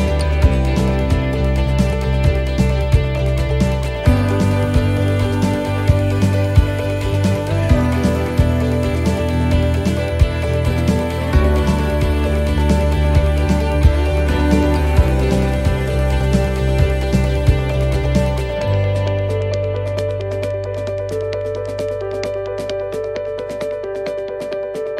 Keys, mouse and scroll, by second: 0.6 shift+middle click, 1.9 shift+middle click, 4.1 shift+middle click, 4.3 scroll up 4, 4.8 shift+middle click, 5.8-6.2 scroll up 2, 6.2 middle click, 7.6 shift+middle click, 8.1-8.6 scroll down 2, 8.6 shift+middle click, 9.5 shift+middle click, 10.0 shift+scroll down 1, 11.1 right click, 12.1 alt+shift+right click, 13.3 shift+d, 15.1 click, 18.6 middle click, 19.8 s, 22.6 middle click, 23.2 shift+middle click, 23.8 scroll down 1, 24.2 shift+middle click, 24.8 middle click.